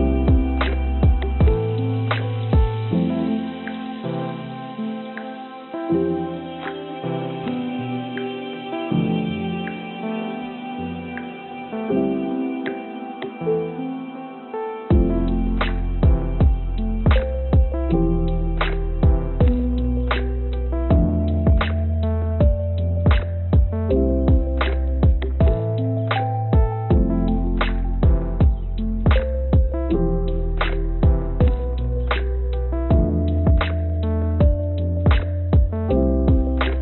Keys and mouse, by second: 0.1 click, 2.4 shift+click, 3.5 shift+click, 3.9 shift+click, 4.9 e, 7.5 click, 7.9 right click, 9.4-14.1 drag, 15.6 click, 22.8 click, 25.1 Tab, 25.4 Tab, 28.3 click, 29.1-30.6 drag, 31.5 click, 32.0 click, 33.6-36.2 drag.